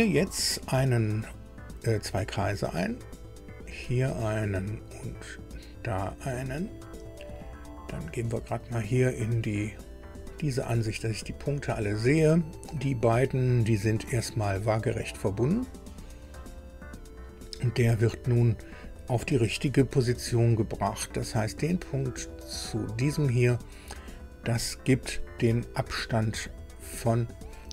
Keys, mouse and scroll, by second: 0.2 click, 2.4 click, 3.7 click, 5.3 click, 6.4 click, 6.7 right click, 10.0 click, 12.0 click, 13.4 click, 16.0 click, 18.6 click, 22.6 click, 24.5 click, 26.5 click.